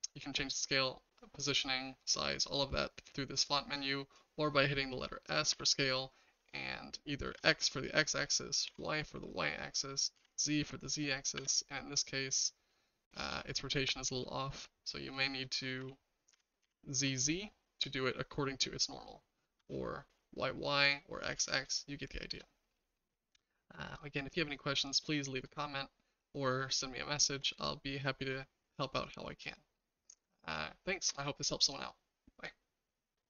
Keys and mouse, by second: 2.1 click, 3.4 click, 5.5 s, 12.8-13.2 shift+middle drag, 13.9 middle click, 15.8 s, 21.7-22.4 shift+middle drag, 22.7 middle drag, 23.8 middle drag, 24.8-25.1 middle drag, 25.7-27.2 shift+middle drag, 29.7 shift+middle click.